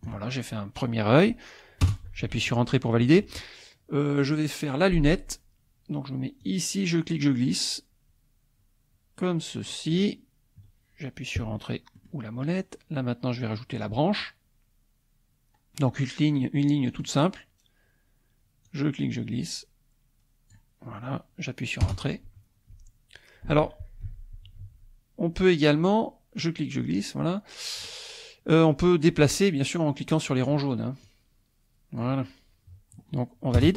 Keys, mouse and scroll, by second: 1.8 Return, 6.5-10.1 drag, 12.0 click, 16.9 click, 18.7-20.7 drag, 21.9 Return, 24.1 ctrl+z, 26.5-28.0 drag, 29.2-31.0 drag, 31.1-33.6 drag, 33.6 Return.